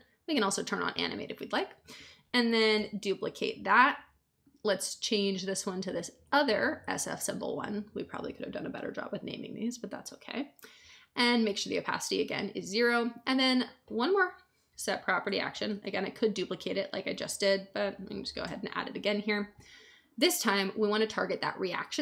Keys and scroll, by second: 2.7 super+d, 14.4-16.7 typing, 17.4 Down, 18.4 Return.